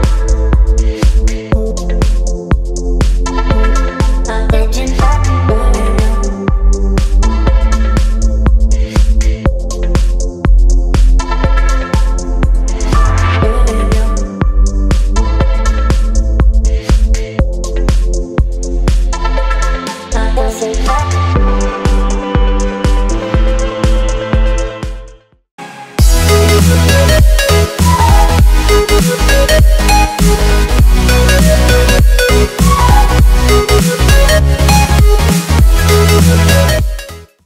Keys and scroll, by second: 17.1 z, 18.6 v.